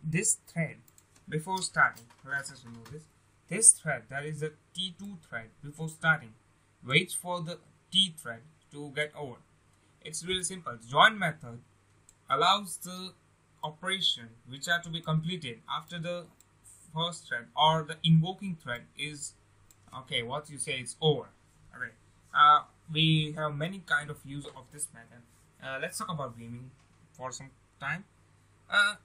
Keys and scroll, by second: 1.3 BackSpace.